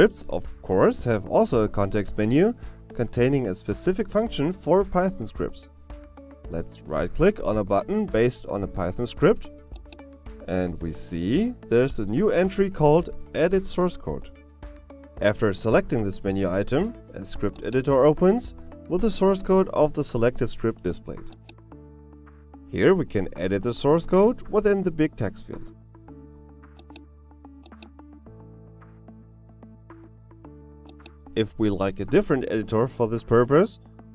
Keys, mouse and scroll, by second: 9.1 right click.